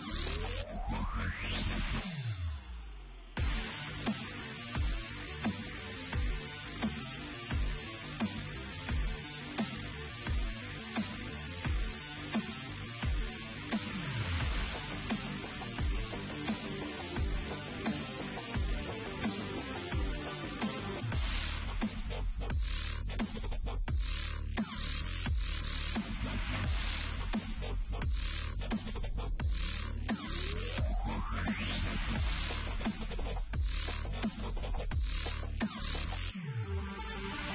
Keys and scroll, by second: 0.1 e, 1.4 v, 9.9 Return, 11.2 Return, 14.7 ctrl+t, 16.9 alt+shift+Return, 18.4 ctrl+l, 22.6 ctrl+m, 30.1-36.8 typing.